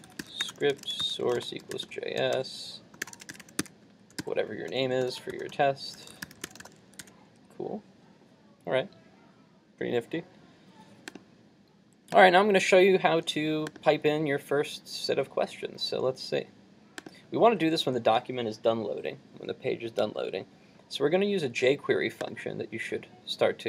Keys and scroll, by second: 7.0 super+s.